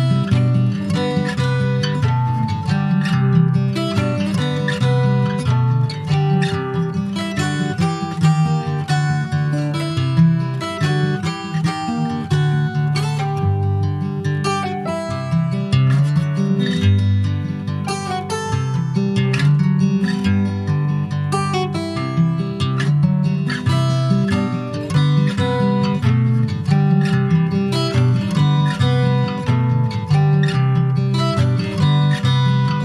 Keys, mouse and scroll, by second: 0.9 ctrl+s, 1.1 click, 1.4 shift+a, 3.5 alt+middle click, 4.5-4.9 scroll up 1, 4.9-7.8 drag, 8.7 shift+middle click, 9.2 r, 12.3 alt+middle click, 12.7-13.3 alt+scroll up 3, 13.0 ctrl+s, 13.5 shift+middle click, 13.9 s, 15.5 click, 16.6 alt+middle click, 17.2 ctrl+s, 17.6 shift+middle click, 18.1 s, 20.5 click, 21.8 middle click, 22.3 Tab, 22.5 click, 22.8 middle click, 23.2 ctrl+s, 23.5 Tab, 23.7 click, 24.0 right click, 24.8 click, 25.1 middle click, 25.5 ctrl+s, 25.6 click, 26.6 click, 27.2 middle click, 27.7 ctrl+s, 27.8 click, 28.5 click, 30.9 middle click, 31.8 scroll up 3, 32.1 ctrl+s, 32.3 middle click, 32.7 Tab.